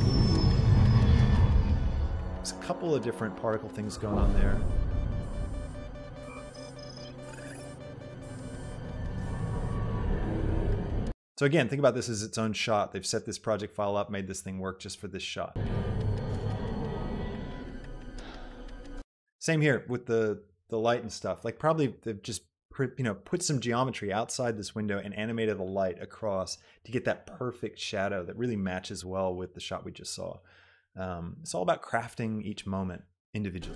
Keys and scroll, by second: 11.0 space, 15.8 space, 19.1 space.